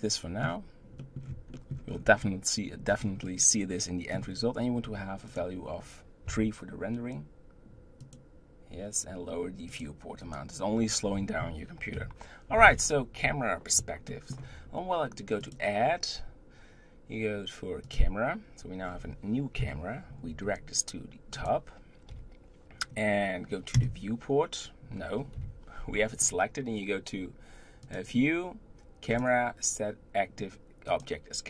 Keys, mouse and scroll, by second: 1.9-2.9 scroll up 6, 2.9-3.2 scroll down 7, 3.2 scroll up 1, 3.2-5.3 middle drag, 5.3-9.3 drag, 9.7 click, 11.9 KP_7, 12.6-14.1 scroll down 6, 14.1-15.4 shift+middle drag, 15.4-18.4 drag, 18.8-19.6 scroll down 4, 19.6 KP_1, 20.4 g, 22.1 KP_7, 23.7 KP_0, 25.3 KP_7, 27.8-30.8 drag.